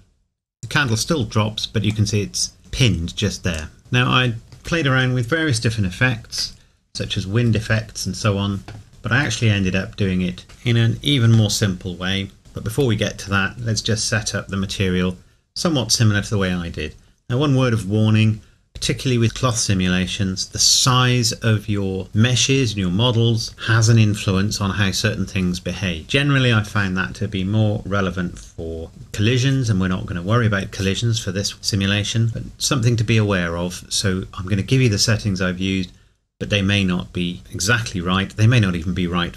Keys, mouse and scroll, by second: 2.1 middle click, 3.8 middle click, 8.9 scroll up 1.